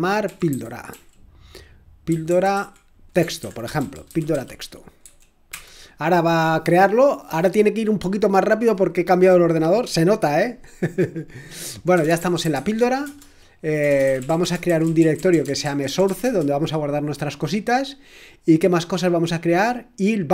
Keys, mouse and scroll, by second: 0.0-5.0 typing, 5.5 Return, 11.7-16.5 typing.